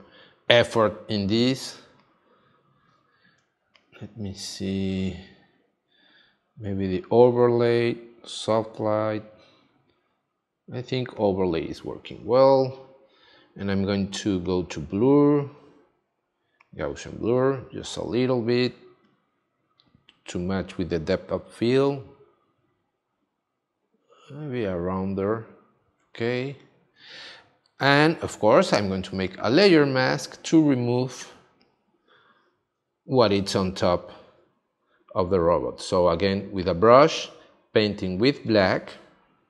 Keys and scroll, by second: 1.7 space, 31.2 space, 38.3 x.